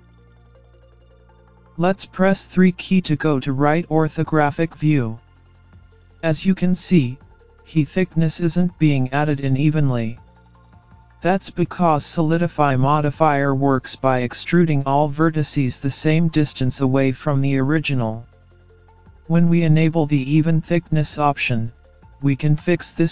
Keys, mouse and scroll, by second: 2.2 KP_3, 3.9 scroll up 2, 4.5-5.4 scroll up 1, 22.6 click.